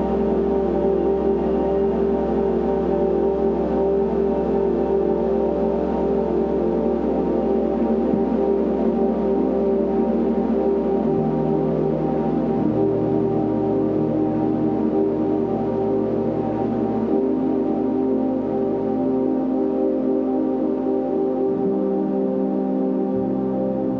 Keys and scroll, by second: 0.6 typing, 5.3 Return, 9.2 typing, 21.1 0, 21.5 ,, 21.5 5, 21.7 Return.